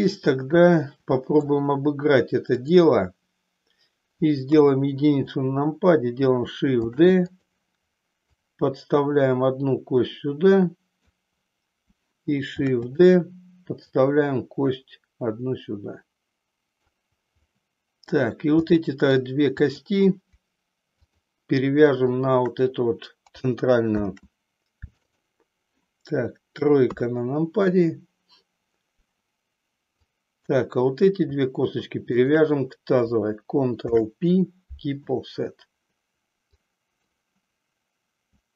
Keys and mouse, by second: 0.0-1.6 middle drag, 4.5 KP_1, 6.7 shift+d, 7.4 click, 8.4-11.1 drag, 12.5 shift+d, 14.0-16.9 drag, 17.5 middle click, 18.8 middle click, 19.6 click, 21.0 shift+click, 22.1 shift+click, 23.9 ctrl+p, 26.9 KP_3, 30.1 click, 32.1 shift+click, 33.7 ctrl+p, 36.7 click.